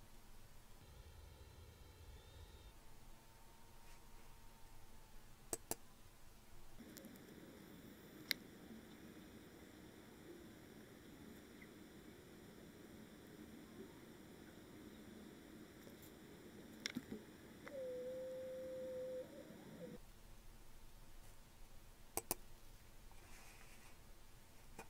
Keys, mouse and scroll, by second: 5.5-6.8 drag, 6.9 click, 7.2-7.7 scroll down 2, 21.2-23.8 drag.